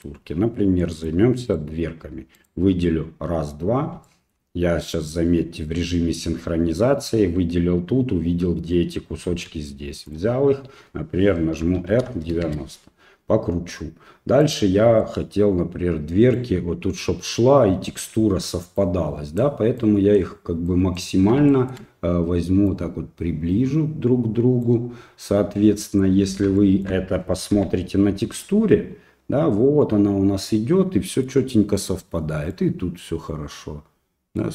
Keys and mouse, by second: 0.8 middle click, 1.5 right click, 2.3 shift+right click, 4.0 shift+middle click, 9.3 g, 11.6 r, 14.4 right click, 15.0-16.4 right drag, 18.8 right click, 19.8 right click, 20.7 right click, 21.5 shift+middle click, 22.7-24.7 right drag, 25.8 click, 26.7 shift+middle click, 27.5 g, 31.3 middle click, 32.5-34.4 middle drag.